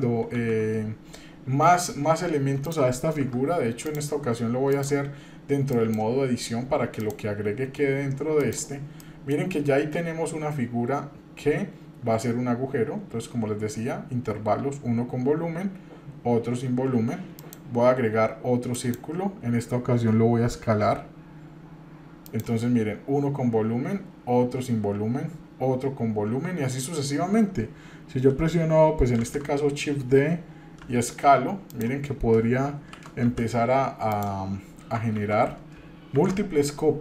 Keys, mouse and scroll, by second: 0.3 shift+a, 4.7-6.0 drag, 7.0-8.5 drag, 9.0 middle click, 17.3-18.9 drag, 20.8 s, 29.2 shift+d, 32.8 shift+g, 34.1 click, 35.1 ctrl+z, 36.2 shift+d.